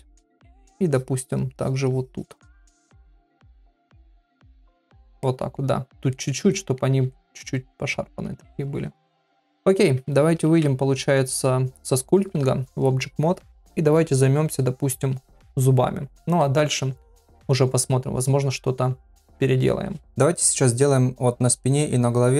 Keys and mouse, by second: 0.5 click, 0.9 click, 1.2 click, 1.5 click, 1.9 click, 2.6 click, 3.0 click, 3.4 shift+click, 4.1 click, 4.9 ctrl+middle click, 5.2 middle click, 6.1 middle click, 6.5 ctrl+middle click, 7.1 shift+middle click, 7.7 middle click, 10.4 ctrl+Tab, 16.1 click, 20.5 middle click.